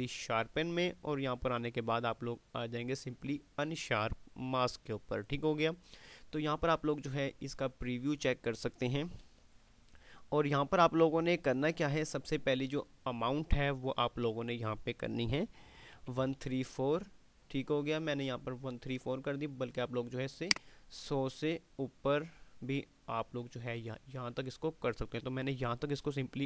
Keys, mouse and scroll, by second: 3.1 click.